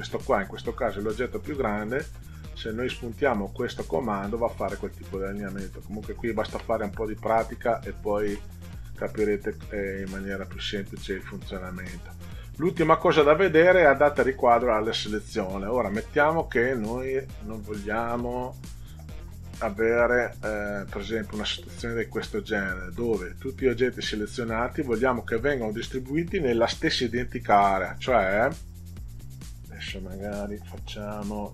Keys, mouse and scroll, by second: 4.6 click, 5.8 click, 10.0 click, 15.7 click, 16.6-17.8 drag, 20.2 click, 21.8-24.2 drag.